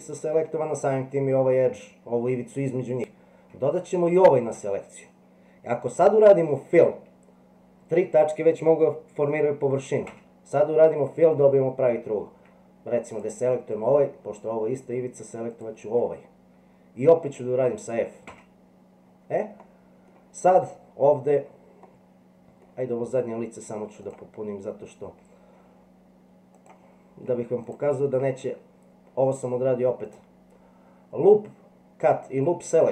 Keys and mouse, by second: 4.1 shift+click, 10.1 f, 15.6 shift+click, 18.3 f, 19.6 middle click, 21.9 middle click, 24.1 click, 26.6 click, 27.6 alt+click, 30.1 click.